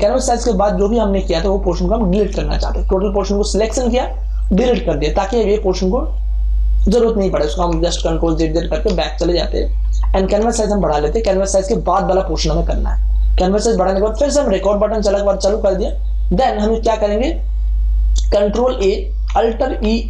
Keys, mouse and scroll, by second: 2.1-4.2 shift+drag, 4.3-5.7 drag, 7.7 ctrl+alt+z, 10.3 ctrl+shift+z, 15.7 click, 18.6 ctrl+a, 19.7 alt+e.